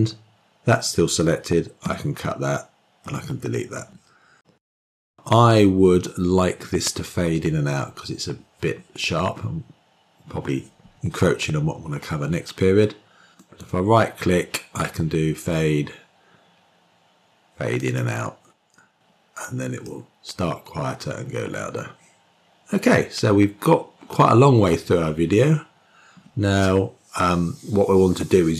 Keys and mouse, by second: 1.7 k, 2.9 Delete, 13.3-17.9 right drag, 19.7-24.1 drag.